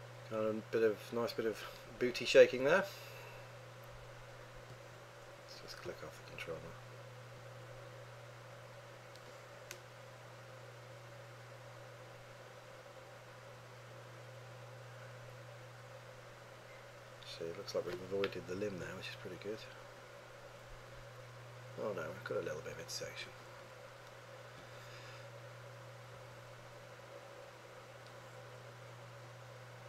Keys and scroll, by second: 18.7 3.